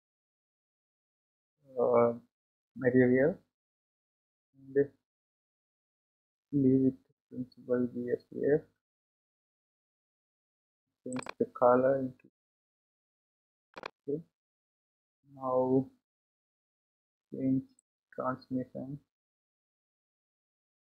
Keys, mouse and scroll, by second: 0.7-12.7 drag, 14.9-18.1 scroll down 8, 18.1-20.8 drag.